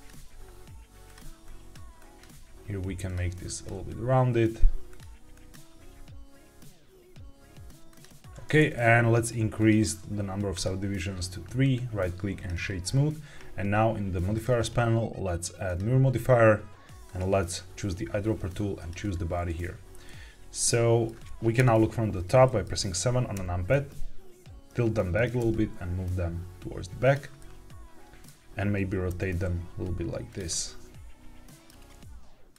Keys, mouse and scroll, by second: 0.0 g, 1.0 click, 1.3 click, 1.9 click, 2.2 g, 3.0 click, 3.4 click, 3.6 g, 4.8 click, 5.2 click, 5.7 g, 7.0 click, 7.0 g, 7.8 click, 8.1 Tab, 9.5 click, 10.4 click, 11.5-12.4 right drag, 14.2-15.7 drag, 17.0 click, 20.0-21.0 middle drag, 21.5 KP_7, 22.3 shift+middle click, 23.3 r, 25.1 click, 25.3 g, 26.9 click, 27.3-28.2 middle drag, 29.0 r, 30.2 click, 30.4-31.6 middle drag, 31.8 r, 32.4 click.